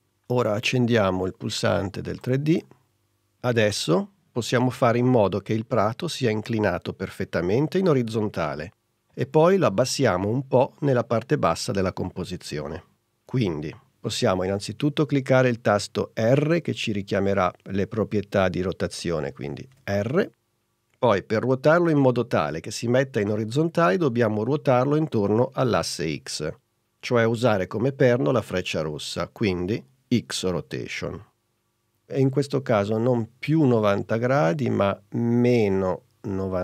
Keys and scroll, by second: 19.8 r.